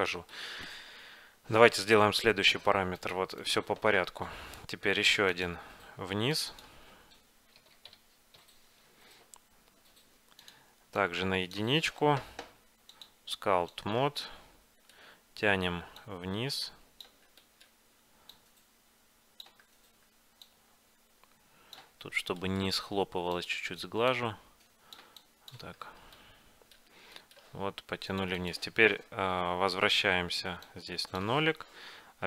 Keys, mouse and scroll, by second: 3.1-5.4 right drag, 5.4-8.5 drag, 11.2-13.4 drag, 14.1 click, 14.4 middle click, 14.8-16.2 middle drag, 16.2-17.8 drag, 17.5-19.3 middle drag, 17.5 right click, 18.5-20.2 drag, 20.0-22.0 middle drag, 20.6-22.3 drag, 22.4 middle click, 22.9-24.8 middle drag, 23.5-27.2 drag, 23.5 right click, 25.9-28.0 middle drag, 26.3 right click, 28.2-30.1 drag, 30.8-32.2 drag, 31.7-32.2 middle drag.